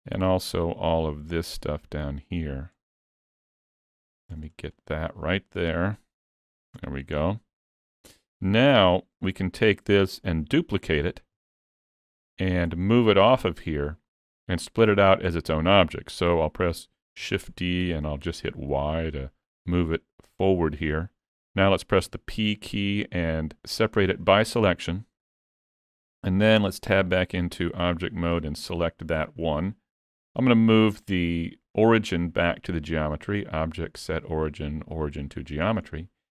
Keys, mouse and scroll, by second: 3.3 middle click, 4.0 shift+middle click, 4.5 scroll up 2, 4.8 middle click, 5.8 c, 7.2-7.8 scroll down 4, 7.6 middle click, 8.9 alt+z, 9.3 shift+middle click, 9.8 middle click, 11.3 KP_Decimal, 12.2 middle click, 13.3-13.7 scroll down 2, 13.8 shift+middle click, 14.9-16.1 scroll down 1, 17.3 shift+d, 19.8 shift+middle click, 20.4 middle click, 22.1 p, 25.3 middle click, 26.7 Tab, 27.9 alt+a, 28.5 click, 33.1 click, 35.9 middle click.